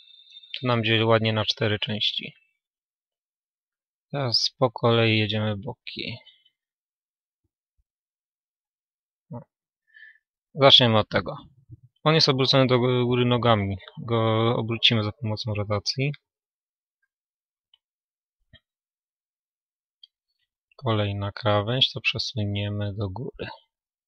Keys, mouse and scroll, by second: 0.8-3.4 right drag, 3.4-8.0 middle drag, 4.0 a, 5.7 a, 6.8-11.8 right drag, 9.0 a, 11.8 a, 12.6 a, 14.6 r, 18.9-20.0 drag, 18.9 a, 20.0-23.6 right drag, 23.6 g.